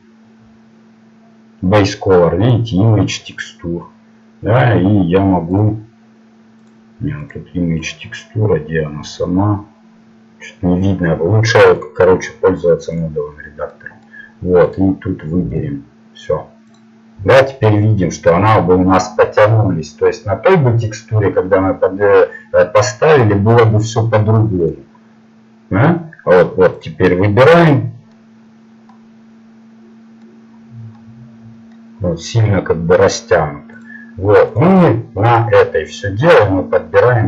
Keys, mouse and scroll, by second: 15.1-16.5 drag, 27.5-29.6 middle drag, 31.2-32.3 middle drag, 32.9 middle click, 34.5 click.